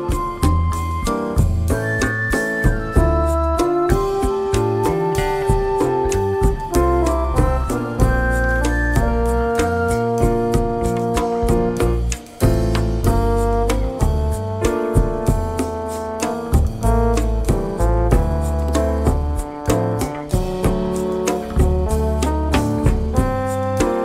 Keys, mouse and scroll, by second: 0.3 click, 1.4 click, 2.6 click, 3.2 click, 4.1 click, 5.1 click, 5.9-7.2 drag, 7.6 click, 8.4-9.4 drag, 10.0 click, 10.6 click, 11.0 click, 11.7-12.4 drag, 13.0 click, 13.8-14.9 drag, 15.3 click, 16.2-17.3 drag, 17.7 click, 19.0 click, 23.0 click.